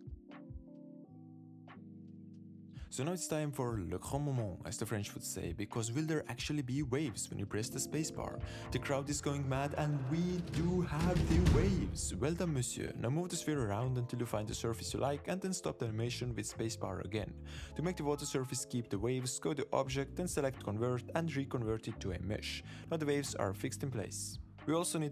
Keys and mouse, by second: 0.8 click, 1.1-2.0 drag, 3.8 shift+click, 5.7 shift+drag, 11.5 space, 11.5 g, 16.6 space, 18.2 click, 18.5 right drag, 19.4-22.6 drag, 23.8 space.